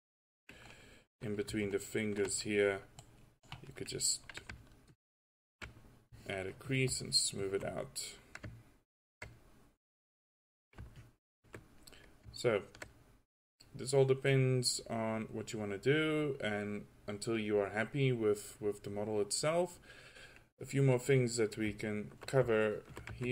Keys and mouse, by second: 3.1-4.6 drag, 8.1-8.5 drag, 8.8 drag, 11.0-12.0 drag, 12.2-12.6 drag, 13.8-14.8 drag, 16.2 middle click, 16.3 middle click.